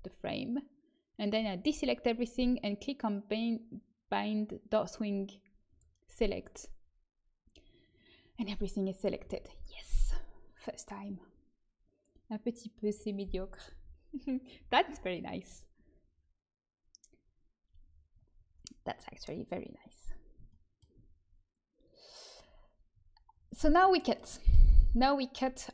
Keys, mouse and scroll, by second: 2.5-7.3 drag, 6.4-8.4 middle drag, 9.2 a, 20.6-22.8 middle drag.